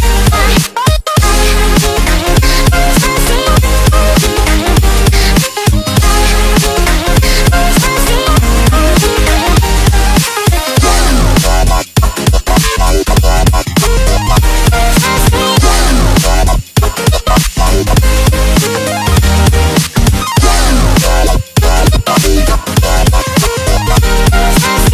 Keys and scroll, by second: 10.6 alt+space, 13.8 Delete.